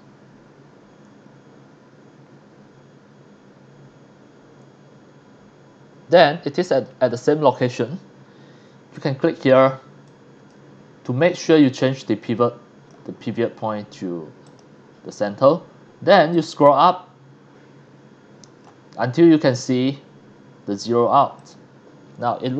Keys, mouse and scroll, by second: 5.2 scroll up 2, 6.1 click, 8.9 click, 10.0 click, 11.6-12.9 drag, 14.5 click, 16.3-18.6 drag, 21.4 click, 22.1 middle click, 22.1 scroll up 1.